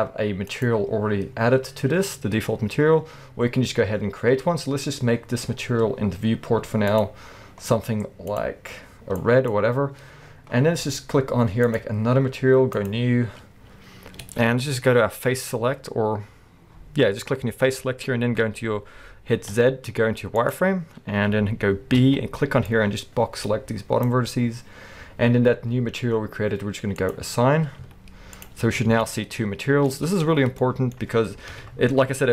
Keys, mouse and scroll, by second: 2.8-5.1 scroll up 2, 5.1-6.9 scroll down 2, 7.6-8.3 scroll down 2, 10.3-11.6 scroll up 2, 11.6 click, 12.7-15.5 drag, 14.2 alt+a, 19.5 z, 22.0 b, 26.9 click, 27.8 z, 28.7 scroll down 1, 28.9 alt+a, 29.5-32.3 middle drag, 30.1 Tab, 31.5 KP_1.